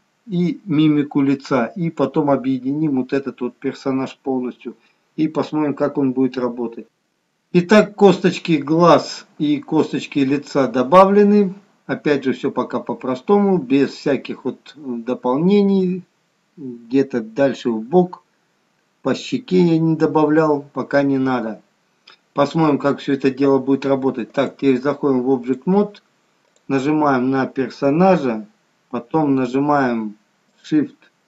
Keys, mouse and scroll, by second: 6.9-8.4 scroll down 1, 24.4 click, 26.6 click, 30.6 ctrl+click.